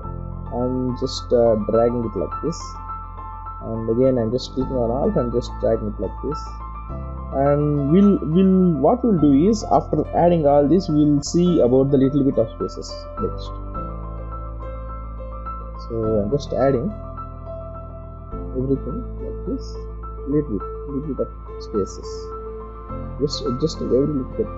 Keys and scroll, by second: 6.1 space, 12.1 space, 14.1 ctrl+-.